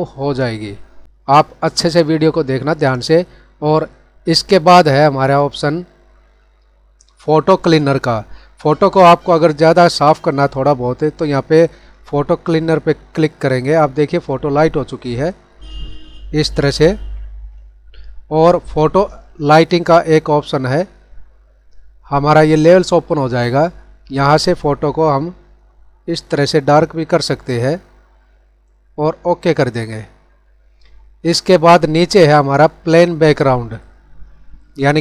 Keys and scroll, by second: 16.9 ctrl+z.